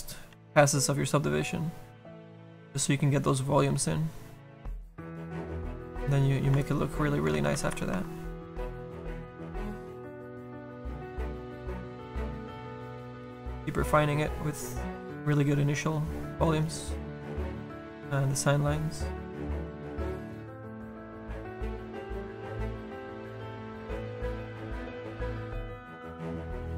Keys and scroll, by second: 7.7 ctrl+z.